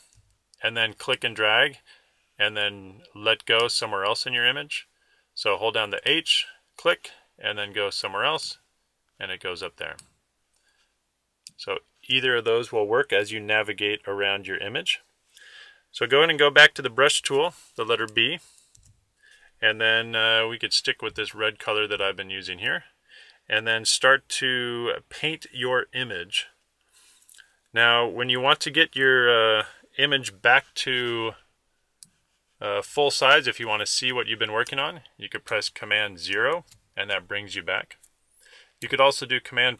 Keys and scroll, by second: 35.6 super+0, 39.4 super++.